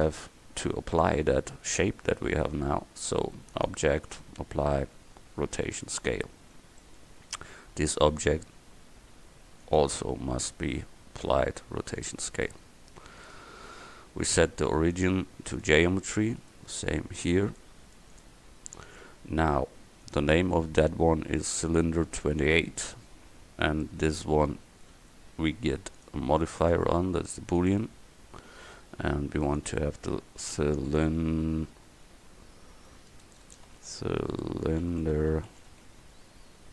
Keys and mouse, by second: 0.5 KP_1, 13.2-17.5 drag, 18.3-21.0 drag, 23.9 click, 26.0-31.9 drag, 33.4 BackSpace.